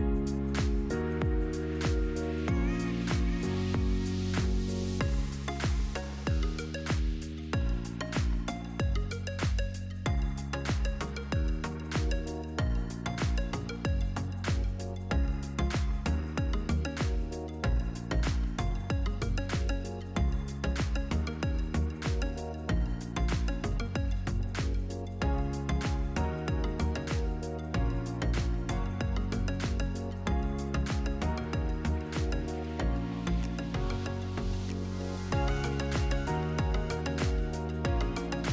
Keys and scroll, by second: 24.7 ctrl+c, 26.2 ctrl+f, 31.6 shift+Up.